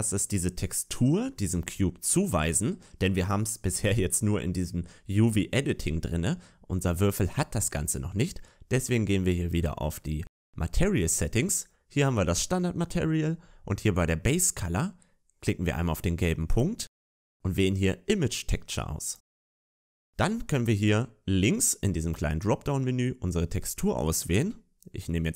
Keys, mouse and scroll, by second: 12.0 click, 19.0 click, 22.3 click.